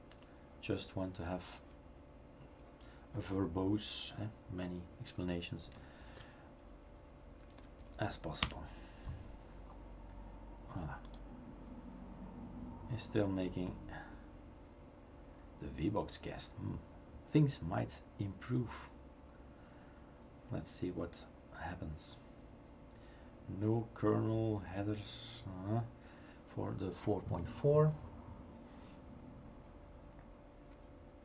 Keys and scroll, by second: 0.1 BackSpace, 6.0 ctrl+s, 8.4 Return, 8.4 typing.